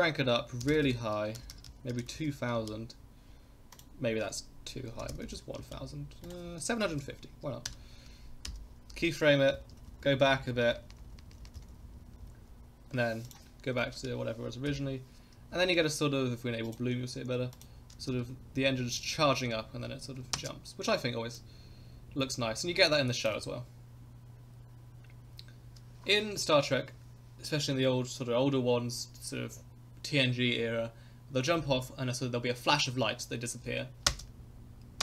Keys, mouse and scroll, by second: 0.8-2.2 typing, 3.7 click, 5.2 0, 5.3 0, 6.2 click, 6.8-9.1 drag, 8.5 i, 9.6 Left, 9.8 Left, 9.9 Left, 10.1 Left, 10.2 Left, 10.3 Left, 10.5 Left, 10.6 Left, 10.8 Left, 10.9 Left, 11.1 Left, 11.2 Left, 11.3 Left, 11.5 Left, 11.6 Left, 11.8 Left, 11.9 Left, 12.0 Left, 12.1 Left, 12.3 Left, 12.4 Left, 13.3-14.8 drag, 14.7 i, 15.3 KP_0, 16.6 click, 17.5 click, 17.9 space, 20.4 space, 21.4-23.3 drag, 34.0 space.